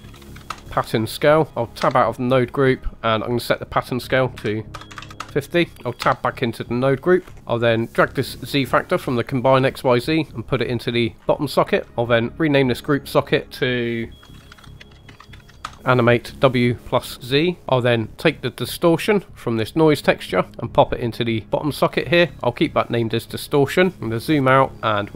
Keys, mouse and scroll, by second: 1.5 Tab, 1.9 Tab, 3.4-5.2 drag, 5.7 Tab, 6.0 Tab, 7.2 scroll down 2, 7.4 right click, 7.9 click, 11.8 drag, 13.2 click, 17.6 middle click, 17.6 scroll down 2, 17.7-18.6 scroll up 1, 19.3 drag, 23.9 middle click, 23.9-24.5 scroll down 6, 24.7 middle click, 24.7-25.1 scroll up 4.